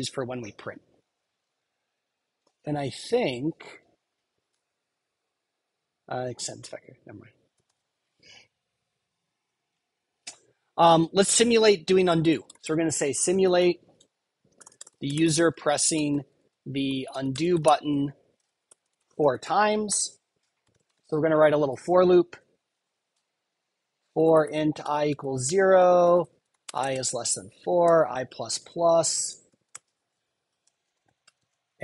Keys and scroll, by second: 7.6 super+w, 10.8 Return, 19.8 Return, 28.7 super+Right, 29.0 Return.